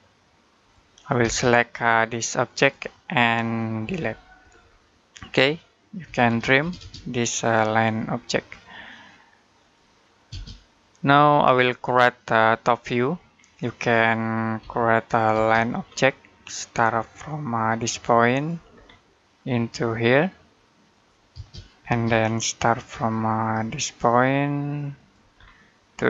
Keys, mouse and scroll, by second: 1.0 space, 1.9 click, 3.7 Delete, 4.3-4.8 scroll down 1, 4.8 middle click, 5.9-6.4 typing, 7.9 click, 10.1 space, 11.0-11.5 scroll down 1, 11.5 middle click, 13.1 scroll down 1, 13.3 middle click, 13.8-14.4 scroll up 1, 14.4 l, 15.1 space, 15.5-17.7 scroll up 1, 18.1 click, 18.5-18.8 scroll down 1, 18.8 middle click, 20.7 click, 21.1 space, 21.9-24.2 scroll up 1, 24.8 click, 25.2 scroll down 1.